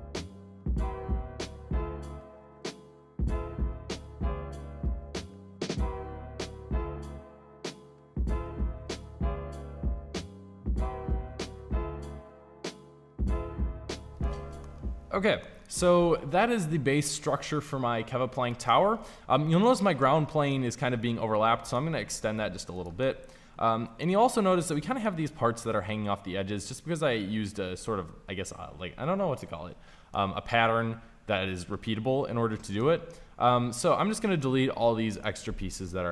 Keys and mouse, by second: 0.0-2.7 typing, 3.7-4.7 typing, 5.7 Delete, 5.7 Delete, 6.3 KP_5, 7.6-9.0 typing, 9.2 Delete, 9.6 Delete, 9.7 Delete, 9.8 Delete, 10.0 ctrl+z, 10.6-12.3 typing, 12.7 Delete, 12.8 Delete, 12.9 Delete, 13.1 Delete, 13.4 Delete, 13.4-13.8 ctrl+z, 13.8 a, 21.1 s, 22.1 s, 22.8 click, 32.5 middle click, 34.9 Delete, 35.9 Delete.